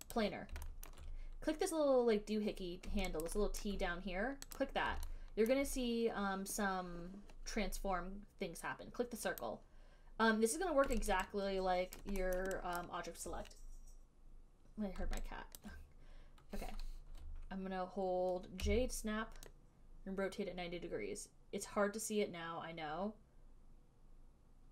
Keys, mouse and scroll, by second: 0.5 click, 0.5 right click, 1.2 alt+middle click, 3.6 alt+right click, 3.9 alt+middle click, 4.9 click, 5.8 alt+middle click, 9.7 click, 11.4 alt+right click, 12.3 alt+right click, 12.7 alt+middle click, 13.1 alt+right click, 15.9 alt+right click, 18.9-24.7 typing.